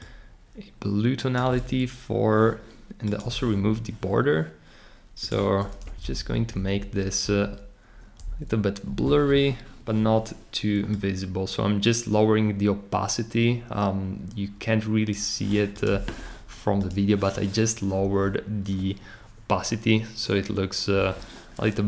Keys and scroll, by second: 5.8 Up, 6.0 Up, 6.1 Up, 6.3 Up, 6.5 Up, 7.2 Up, 8.2 Up.